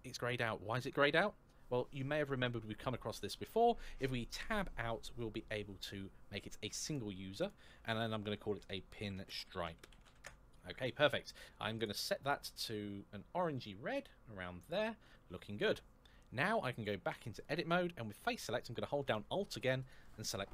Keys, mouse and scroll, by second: 4.2 Tab, 6.6 click, 8.3-9.9 typing, 10.0 Return, 11.0 scroll down 1, 11.5 click, 16.8 Tab, 19.6 alt+click.